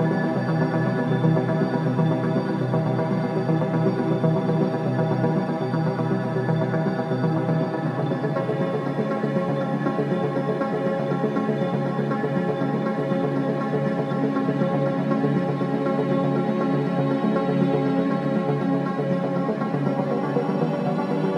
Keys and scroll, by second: 1.0 3, 1.2 4, 8.4 3, 8.6 ], 8.8 Delete, 11.7 4, 14.0 2.